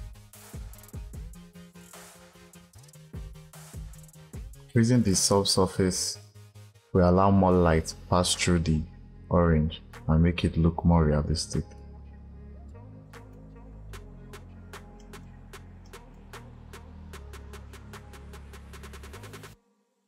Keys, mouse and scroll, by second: 0.6 click, 12.7-14.9 drag, 14.9-18.9 middle drag, 19.1 click.